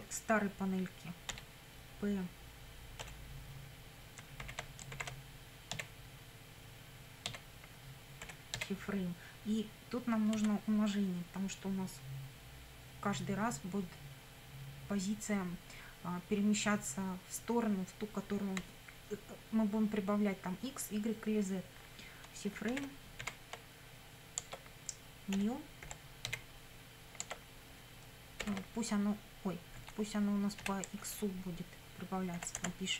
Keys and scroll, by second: 1.3 p, 3.0 ., 4.4 shift+c, 4.9 shift+f, 5.7 r, 7.3 a, 8.2 m, 8.6 e, 10.4 *, 22.7 shift+c, 23.2 shift+f, 24.5 Tab, 25.4 ., 25.9 n, 26.3 e, 27.2 Tab, 28.5 shift+9, 29.8 Delete, 30.6 BackSpace, 31.1 Left, 32.1-32.9 typing.